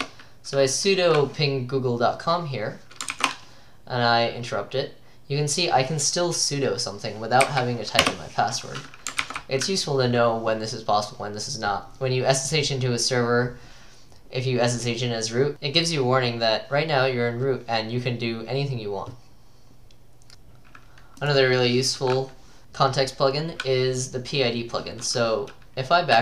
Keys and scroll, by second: 3.2 ctrl+c, 7.5 Caps_Lock, 7.7 Up, 8.0 Return, 9.2 ctrl+c.